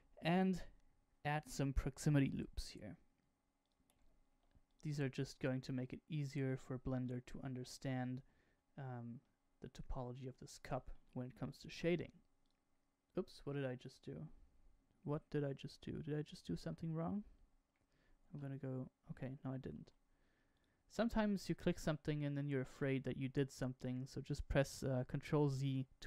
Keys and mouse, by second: 1.4 ctrl+r, 4.2 ctrl+r, 7.0 middle click, 9.1-10.7 middle drag, 11.6 ctrl+r, 16.1 Escape, 18.2 ctrl+z, 19.5 ctrl+r.